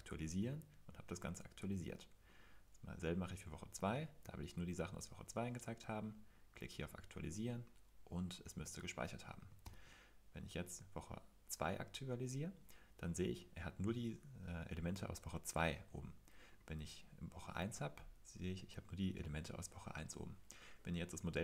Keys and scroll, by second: 9.6 super+l.